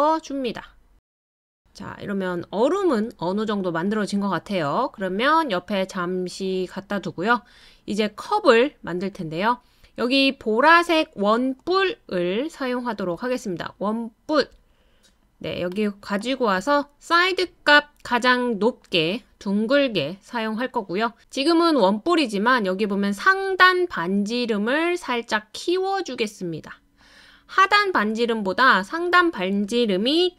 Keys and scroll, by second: 30.2-30.3 typing.